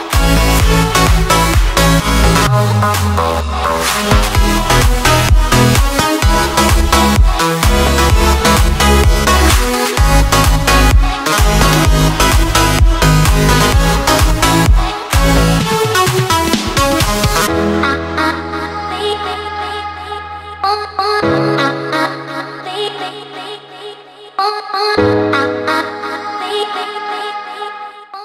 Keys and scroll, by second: 1.5 ctrl+z, 1.8 ctrl+z, 4.7 ctrl+z, 6.4 ctrl+z.